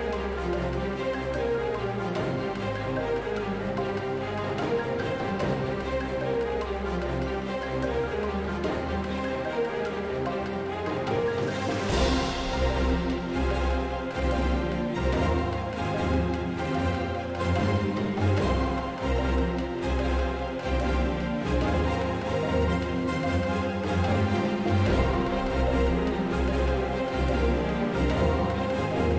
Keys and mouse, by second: 1.2 Tab, 1.2 z, 3.4-5.1 typing, 6.0-7.0 drag, 7.0 n, 9.0 alt+z, 9.2 a, 10.5 ctrl+Tab, 15.9-17.6 typing, 18.7 a, 21.1 shift+space, 21.6 v, 23.2 ctrl+z, 24.0 v, 24.4 a, 25.6 shift+space, 25.7 alt+a, 26.1 z, 26.1 z, 26.3 alt+a, 26.8 alt+z, 27.7 Tab, 27.8 Tab, 27.9 Tab, 28.2 KP_Divide, 28.5-29.1 typing.